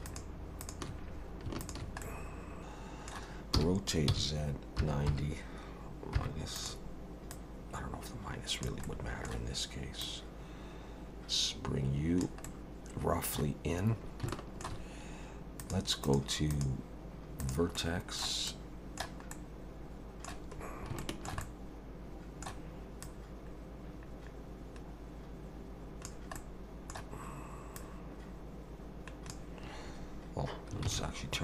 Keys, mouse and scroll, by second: 0.1 shift+click, 0.6 shift+click, 1.6 shift+click, 2.0 middle click, 2.6 click, 2.6 middle click, 3.5 r, 7.3 click, 8.8 middle click, 10.0 click, 12.4 middle click, 14.3 shift+middle click, 15.6 click, 16.0 click, 16.5 click, 19.3 middle click, 20.6-20.9 scroll up 3, 21.0 shift+middle click, 21.4 middle click, 23.0 click, 26.4 middle click, 27.8 click, 30.9 ctrl+z.